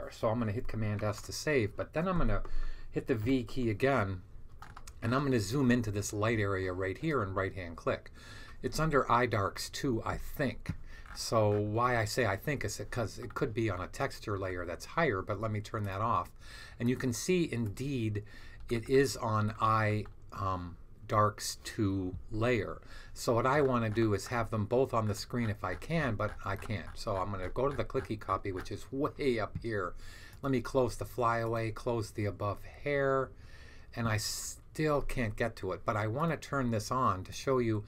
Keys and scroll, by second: 0.9 super+s, 3.1 v.